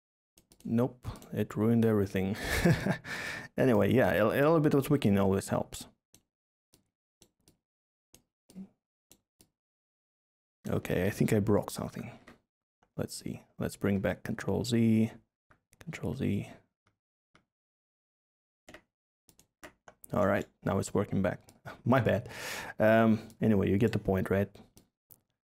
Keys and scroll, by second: 10.8 ctrl+z, 11.0 ctrl+z, 11.2 ctrl+z.